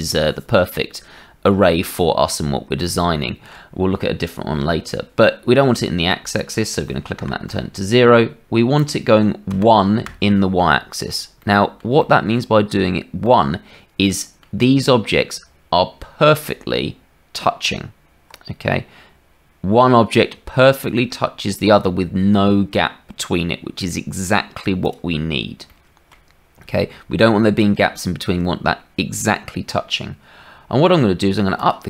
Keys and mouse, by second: 3.1 shift+middle click, 6.2-8.0 drag, 8.7-10.6 drag, 11.4 middle click, 11.9 shift+middle click, 13.2-14.4 drag, 17.6 Tab, 20.3 Tab, 25.8 shift+click, 28.0 shift+click.